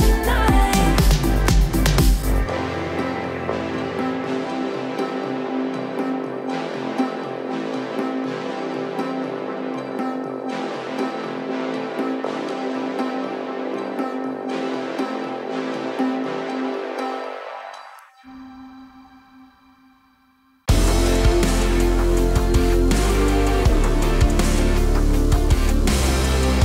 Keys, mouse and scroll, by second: 0.4-1.4 alt+drag, 4.1 Delete, 4.9-5.8 middle drag, 10.3-10.9 scroll up 1, 10.9-11.5 middle drag, 18.0-20.2 drag, 20.4-21.7 scroll up 1, 21.7-22.3 middle click, 22.8-23.3 scroll down 1, 23.3 middle click, 25.7-26.6 alt+drag.